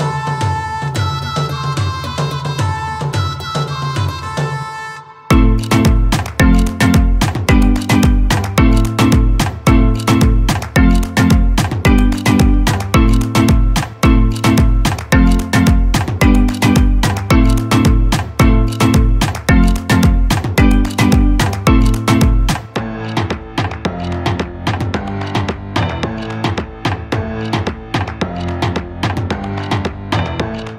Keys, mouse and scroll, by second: 3.1 click, 5.4-9.3 shift+drag, 9.3 right click, 10.1 click, 14.1-28.4 shift+drag.